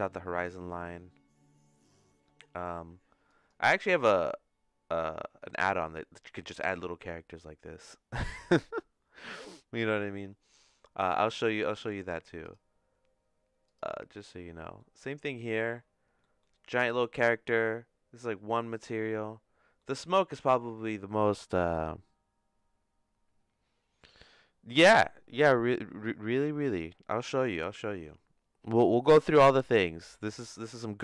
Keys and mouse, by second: 3.4 click, 12.4 click, 14.8 middle click, 19.8 middle click, 27.9 middle click.